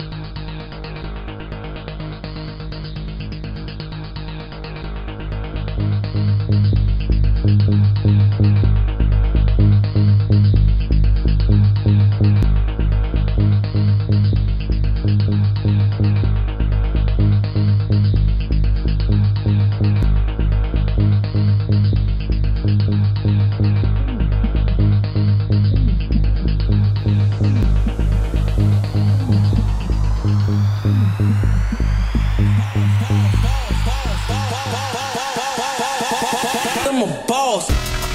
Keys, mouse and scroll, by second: 13.8 click, 16.1 middle click, 17.8 shift+middle click, 20.4 shift+middle click, 22.4 shift+middle click, 24.0 shift+middle click, 29.7 click, 35.9 click.